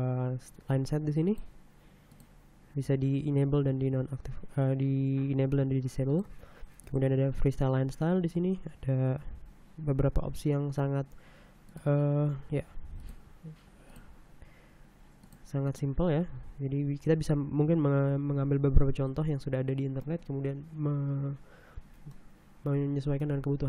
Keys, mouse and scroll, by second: 1.2 click, 2.1 click, 4.3 scroll down 2, 6.1 click, 6.8 click, 7.9-8.3 scroll down 1, 11.6 click, 12.9 click, 13.9 click, 15.2 click, 15.6 click, 16.3 scroll down 1, 19.0-20.2 middle drag, 22.1-23.1 middle drag, 23.1 click, 23.3 scroll down 1, 23.5 scroll up 1.